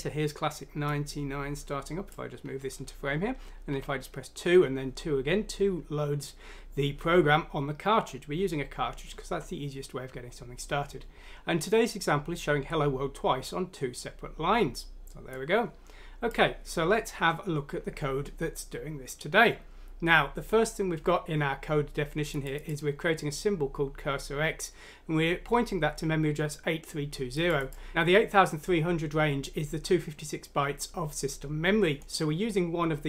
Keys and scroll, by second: 3.8 2, 7.9 2.